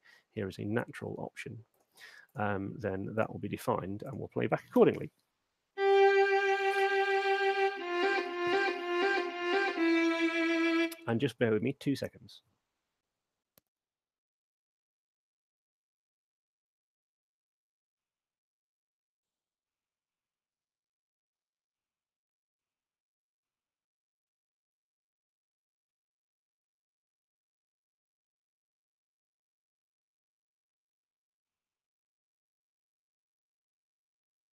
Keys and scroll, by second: 4.8 alt+shift+space, 11.1 space.